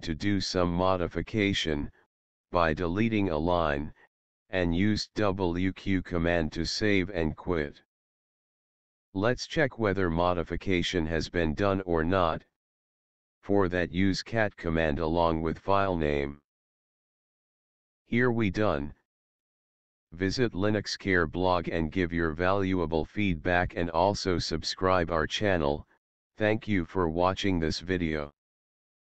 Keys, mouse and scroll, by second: 2.0 typing, 4.8 typing, 6.9 Return, 9.0 ctrl+l, 13.3-17.7 typing, 20.7 Return.